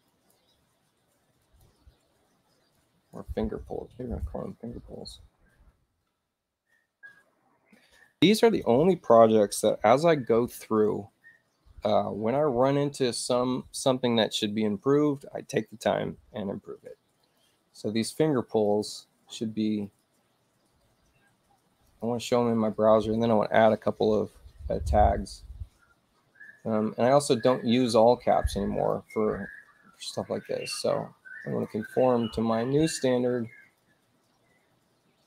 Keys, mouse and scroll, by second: 0.1 click, 1.4 click, 2.8 click, 3.6-4.8 typing, 17.2 click, 18.7 click, 19.8 right click, 21.9 click, 28.3 click, 30.0 click, 31.5 click, 31.7 click, 33.7 click.